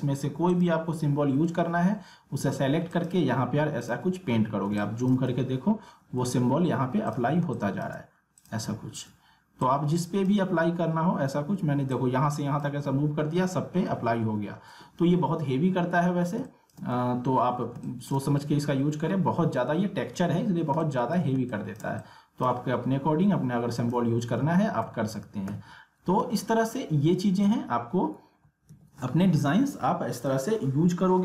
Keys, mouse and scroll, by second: 1.0 alt+scroll up 1, 2.9 click, 4.7 space, 4.8 click, 5.4 alt+scroll up 1, 6.4 scroll down 1, 7.1 click, 7.4 space, 7.5 click, 8.8 alt+scroll down 2, 9.9 click, 13.4 ctrl+z, 15.2 alt+scroll up 1, 15.8 alt+scroll down 1, 16.4 space, 16.5 click, 17.0 alt+scroll up 1, 17.3 alt+scroll down 1, 17.7 space, 17.9 click, 18.3 alt+scroll up 1, 19.0 alt+scroll down 1, 20.7 space, 20.8 click, 21.3 space, 21.6-23.8 drag, 24.4 ctrl+z, 30.1 click.